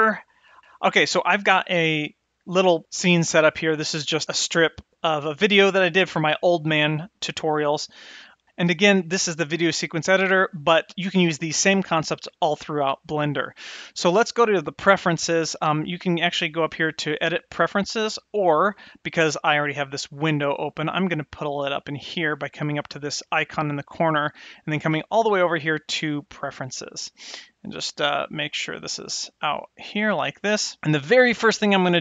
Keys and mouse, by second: 4.5-8.4 drag, 8.7 shift+Left, 15.7-18.3 drag, 20.0-21.0 drag, 23.0-26.4 drag, 28.1-30.8 drag.